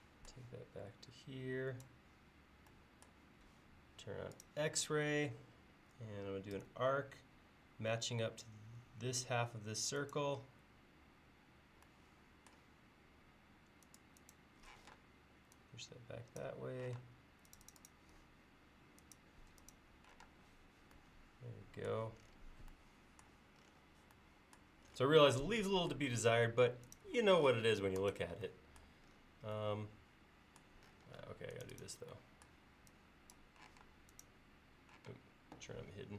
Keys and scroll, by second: 6.6 a, 14.9 p, 17.0 space, 20.3 space, 33.8 m, 35.1 space.